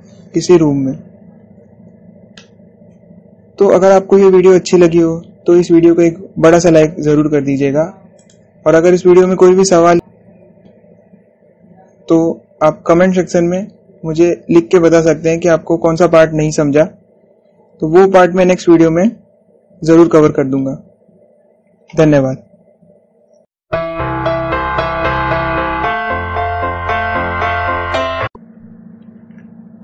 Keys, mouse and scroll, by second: 2.6 scroll up 1, 3.1-7.4 middle drag, 8.9 click, 11.3 typing.